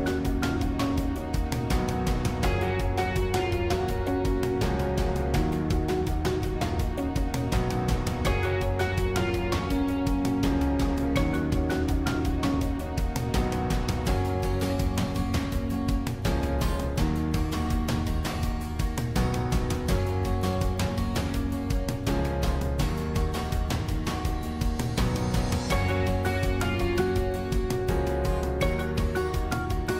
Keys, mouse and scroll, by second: 0.2-0.6 scroll up 1, 0.6-1.8 middle drag, 1.8-2.2 scroll down 2, 2.2-4.1 middle drag, 4.1-4.7 scroll down 3, 4.7-8.2 middle drag, 8.2-8.7 scroll up 1, 8.7 middle click, 9.3-9.8 scroll up 1, 9.8-10.9 middle drag, 10.9-11.4 scroll up 3, 11.4-14.2 middle drag, 14.2 scroll down 1, 14.4-15.7 middle drag, 15.7 scroll down 1, 16.0-18.5 middle drag, 18.5 Tab, 20.5-22.9 middle drag, 22.9-29.9 drag.